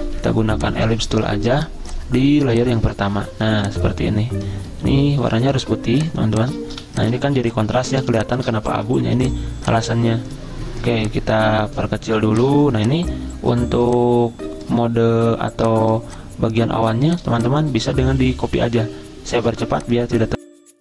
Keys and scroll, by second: 0.0 l, 5.3 d, 6.7 v, 7.3 z, 8.8 v.